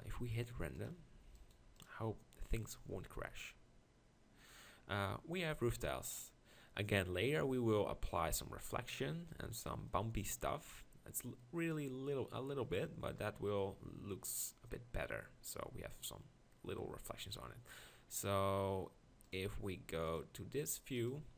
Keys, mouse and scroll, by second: 9.7-13.4 middle drag.